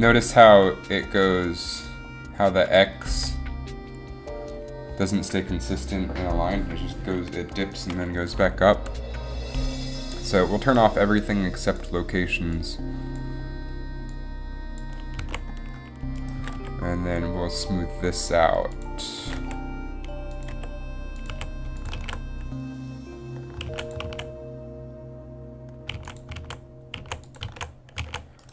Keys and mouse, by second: 0.5-1.8 drag, 3.2 g, 3.4 g, 7.6 g, 15.4 a, 16.5 g, 19.4 g, 20.6 r, 21.4 a, 22.1 alt+a, 24.0 alt+a, 24.3 alt+a, 24.9 alt+a, 26.2 alt+a, 26.5 alt+a, 27.2 alt+a, 27.6 alt+a, 28.3 alt+a.